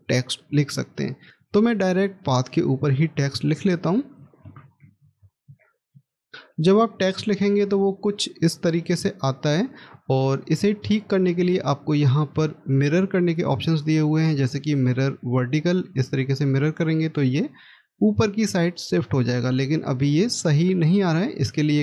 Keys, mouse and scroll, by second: 1.1 scroll down 1, 4.3-6.1 typing.